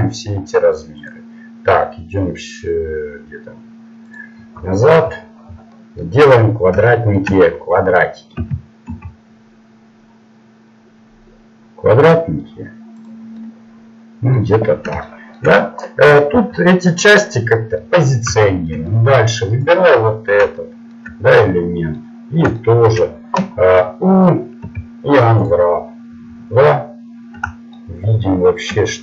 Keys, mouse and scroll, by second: 8.4 s, 13.4-16.8 middle drag, 16.4 g, 17.8 middle click, 19.5-20.8 drag, 19.5-20.8 right drag, 24.6 u, 25.5 u, 26.3-29.0 middle drag.